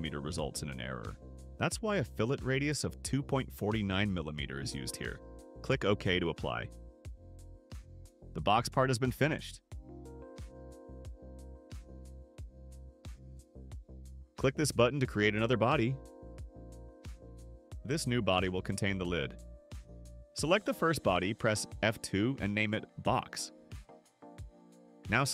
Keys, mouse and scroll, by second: 6.1 click, 7.3-7.7 scroll down 4, 8.7 click, 17.1 click, 20.8 click, 22.5 F2, 22.9-24.2 typing.